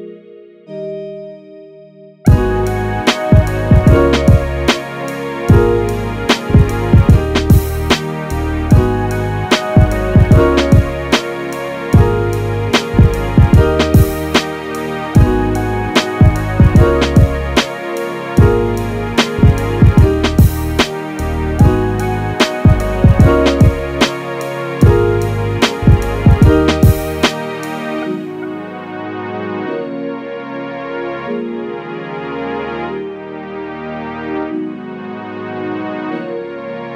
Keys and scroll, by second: 1.1 m, 1.8 m, 2.6 space, 9.7 super+z, 10.4 super+z, 11.3 space, 33.6 space.